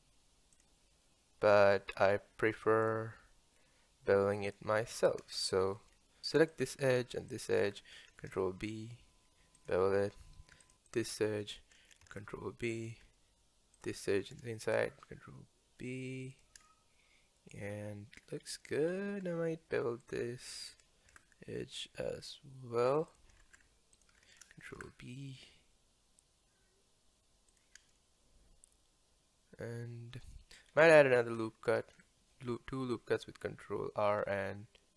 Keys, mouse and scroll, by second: 4.5 click, 4.9 Tab, 5.4 shift+middle click, 5.9 scroll up 1, 6.5 alt+click, 7.3 alt+shift+click, 8.2 ctrl+b, 10.6 alt+click, 10.9 alt+click, 12.0 ctrl+b, 13.8 alt+click, 14.7 ctrl+b, 16.7-18.4 middle drag, 18.4 scroll up 2, 18.6 scroll down 1, 18.9-20.0 scroll up 2, 20.0 alt+click, 21.1 ctrl+b, 23.9 alt+click, 24.7 ctrl+b, 28.0-30.7 middle drag, 30.7-31.9 scroll up 1, 31.9 ctrl+r.